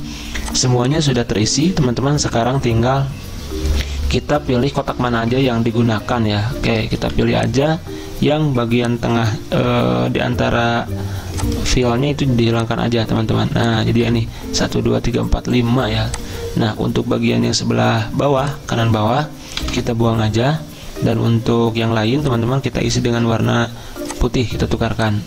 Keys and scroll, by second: 0.0 z, 7.0 v, 10.3 Delete, 11.7 Delete, 13.0 Delete, 14.0 Delete, 19.6 Delete.